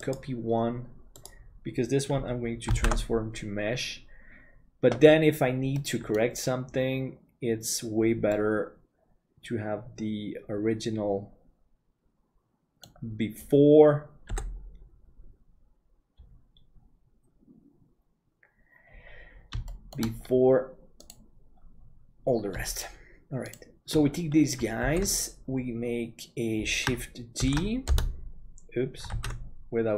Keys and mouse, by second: 8.3-13.0 middle drag, 14.3 KP_7, 19.6 shift+middle click, 25.1 ctrl+s, 27.6 shift+d.